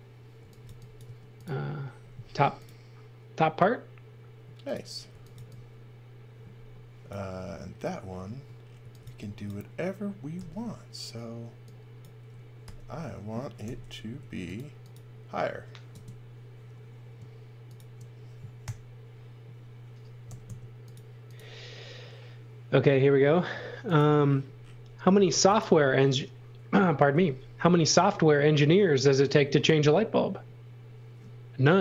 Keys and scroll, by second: 0.3 x, 0.6 v, 1.0 space, 2.2 m, 4.8-5.8 typing, 8.2-10.3 typing, 12.6 r, 13.6 Right, 14.1 Left, 15.9 space, 18.6 r, 20.2 Left, 25.1 space, 27.1 r.